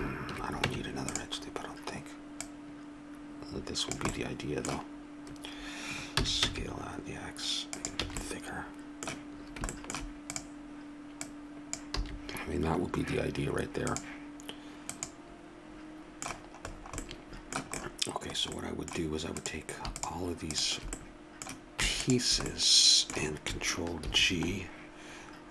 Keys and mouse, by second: 0.7 Tab, 6.1 s, 8.0 a, 10.3-16.0 drag, 12.0 a, 16.0 a, 18.6-19.8 middle drag, 19.8 right click, 20.4 middle click, 20.9-22.0 middle drag, 22.0-23.8 right drag, 24.0 ctrl+g.